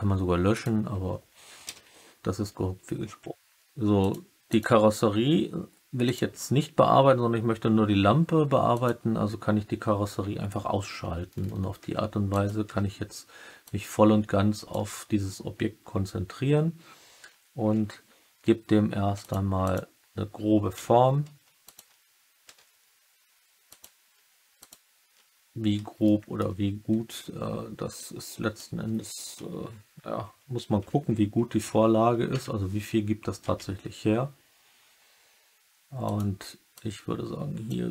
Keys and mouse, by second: 0.4 click, 3.9 click, 4.4 click, 6.0-7.2 drag, 8.6 click, 11.7 Tab, 12.3 click, 12.6 Tab, 13.6-14.6 drag, 17.6 ctrl+r, 19.6 click, 22.4 s, 23.6 click, 26.0 alt+click, 27.9 click, 31.5 KP_3, 32.2 KP_3, 32.4 KP_1, 33.4 s, 36.0 click, 36.7 click.